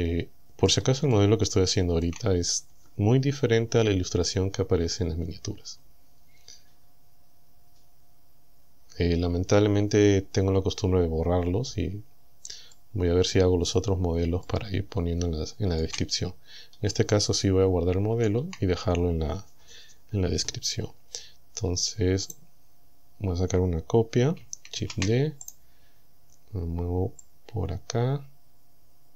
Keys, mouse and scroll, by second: 1.1 shift+scroll up 2, 1.1 shift+middle click, 1.2-2.3 shift+drag, 12.7-13.9 drag, 14.5 shift+click, 14.7-16.0 shift+middle drag, 16.4 scroll up 2, 17.1-18.5 shift+middle drag, 22.3 right click, 24.8 shift+d, 25.5 right click, 27.3-29.1 drag.